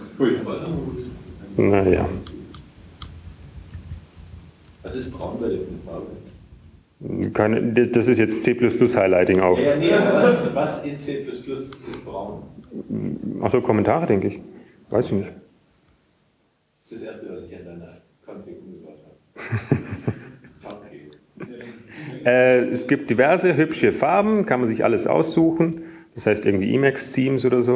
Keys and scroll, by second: 0.1 Up, 0.1 Down, 4.6 ctrl+g, 4.6 Up, 4.6 Down, 5.3 ctrl+g, 6.0 Down, 6.6 Down, 7.3 ctrl+Down, 8.2 Down, 9.1 Down, 10.2 ctrl+Down, 11.2 Down, 12.3 typing, 15.0-17.7 typing, 23.7 Down, 25.1-27.7 Down, 26.4 alt+x, 26.7 ctrl+g, 27.0 super+-.